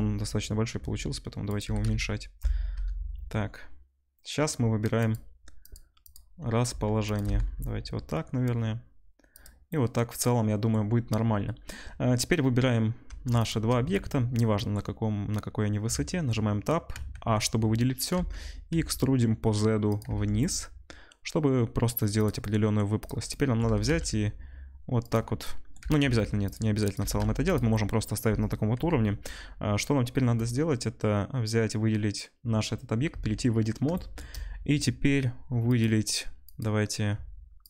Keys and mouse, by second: 0.7 s, 1.6 g, 5.7 middle click, 6.6-13.2 drag, 6.6 s, 7.2 g, 13.4 shift+middle click, 13.4-22.2 shift+drag, 15.8 Tab, 16.9 a, 18.1 e, 20.0 Tab, 22.2 middle click, 23.0-30.4 drag, 23.6 g, 25.8 g, 27.0 g, 28.7 KP_7, 30.4 middle click, 30.4-37.6 drag, 33.1 Tab, 36.5 middle click, 36.5 right click.